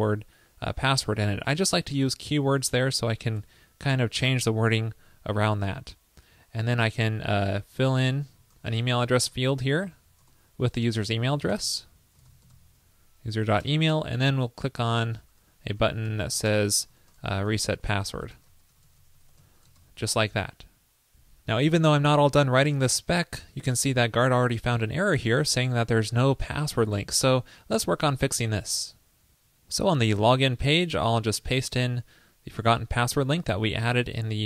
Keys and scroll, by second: 3.4 super+Return, 11.7 ctrl+l, 13.6 super+Return, 19.9 super+s, 31.4 super+v.